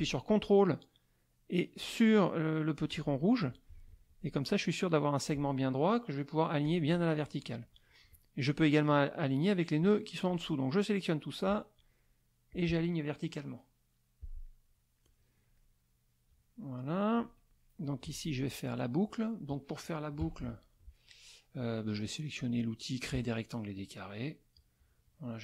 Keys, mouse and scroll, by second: 2.9 ctrl+click, 3.9 ctrl+click, 6.6 click, 8.1 shift+click, 10.3-11.6 drag, 12.5 click, 14.5 middle click, 15.6 middle click, 16.6 middle click, 18.1 z, 18.3 click, 20.2 KP_Subtract, 21.0 middle click, 22.5 click, 24.6-25.4 drag.